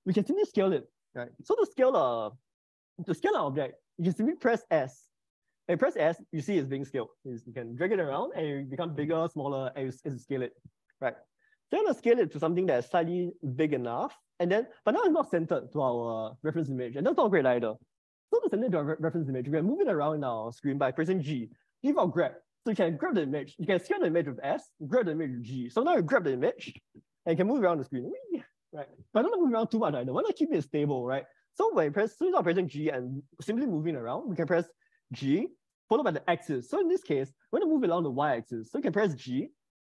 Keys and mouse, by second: 5.1 s, 26.7 g, 33.0 Escape, 35.5 g, 39.7 g.